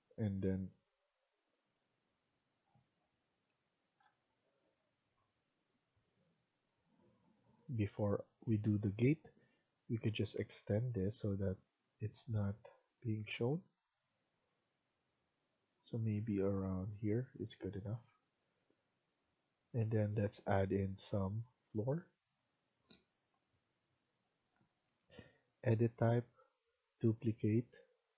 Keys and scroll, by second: 17.8 Escape.